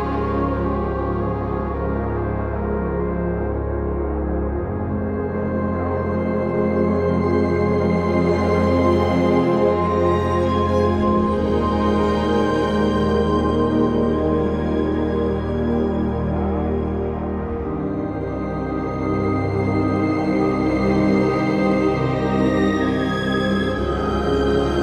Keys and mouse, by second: 0.7 shift+click, 1.5 j, 2.0 click, 3.2 j, 4.7 click, 7.2 shift+j, 7.4 shift+click, 8.3 j, 8.9 click, 9.6 shift+click, 10.4 j, 10.9 click, 12.3 j, 14.2 j, 14.9 shift+click, 15.7 j, 16.4 click, 17.0 shift+click, 17.7 j, 18.5 click, 19.8 j, 20.1 click, 20.5 shift+click, 21.4 j, 22.4 a, 23.0 right click, 24.5 2.